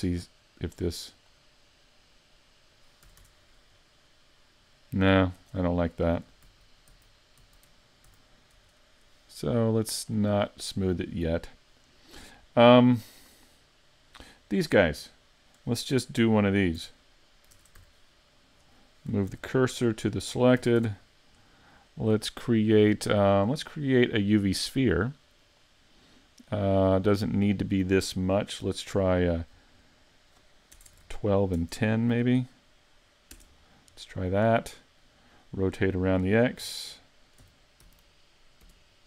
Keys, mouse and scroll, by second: 2.9 click, 3.1 a, 3.2 Tab, 3.4-3.8 scroll down 5, 3.8 middle click, 5.4 Tab, 5.6-6.3 scroll up 6, 6.5 z, 6.9 z, 7.4 z, 8.1 a, 8.6 Tab, 10.3 click, 10.8-11.2 scroll down 3, 11.2 middle click, 12.0-12.7 scroll up 4, 12.7 shift+middle click, 13.3 middle click, 16.8 Tab, 17.6 ctrl+Tab, 18.5 right click, 19.3 shift+s, 20.6 a, 20.8 Tab, 21.0-21.5 scroll down 3, 21.5 middle click, 23.2 click, 25.5 click, 27.3 click, 30.9 BackSpace, 35.0 middle click, 36.6 r.